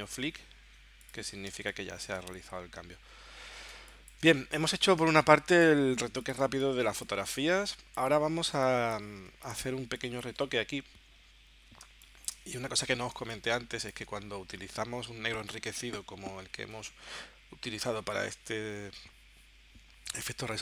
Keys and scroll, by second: 1.5 space, 3.7 space, 5.0 space, 6.4 space, 8.0 space, 9.6 space, 11.8 space, 13.2 space, 16.7 w.